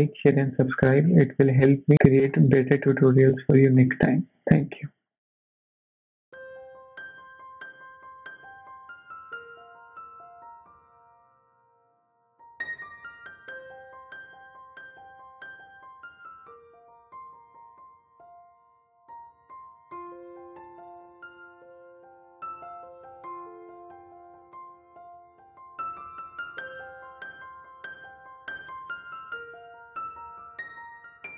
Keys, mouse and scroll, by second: 1.4-2.2 scroll down 1, 2.2-3.3 scroll up 6, 3.2 shift+middle click, 3.8 middle click.